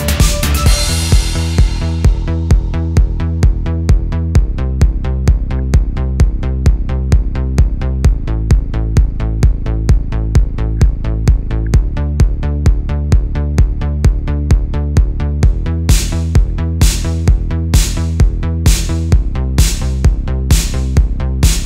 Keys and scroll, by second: 0.8 super+z, 1.6 space, 1.8 super+z, 1.9 space, 3.2 space, 4.1 space, 4.5 space, 5.1 super+space, 6.1 super+z, 7.4 space, 8.3 super+z, 9.0 space, 9.4 space, 10.7 space, 11.5 super+z, 11.8 super+z, 12.0 space, 13.1 super+z, 13.8 super+z, 14.9 space, 15.4 space, 15.9 alt+super+space, 16.6 super+space, 17.6 space, 18.7 super+z, 19.3 space, 20.4 super+z, 21.2 space, 21.5 space.